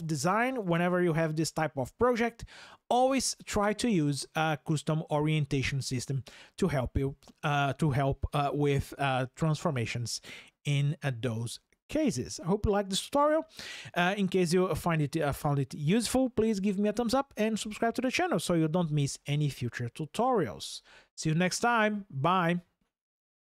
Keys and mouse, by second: 3.4-23.4 drag.